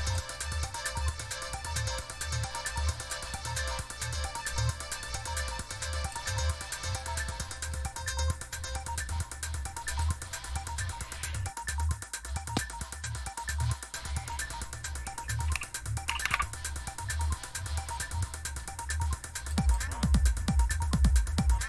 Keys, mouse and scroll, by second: 0.0 click, 2.9 click, 6.0 click, 7.7-9.0 drag, 9.9 click, 16.1 super+w, 19.4 click, 19.6 click.